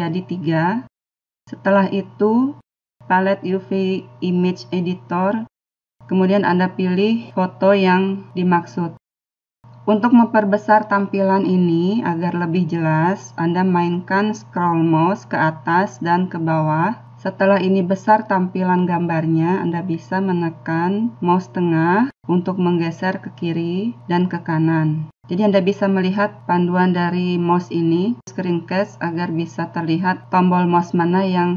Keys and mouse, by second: 1.8 click, 7.3 click.